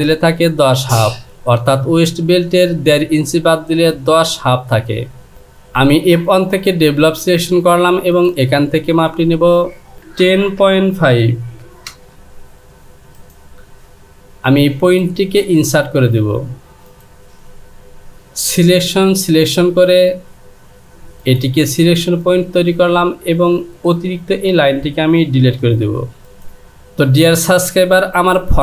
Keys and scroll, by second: 9.9 KP_1, 10.2 KP_0, 10.6 KP_Decimal, 11.9 Return, 25.7 Delete.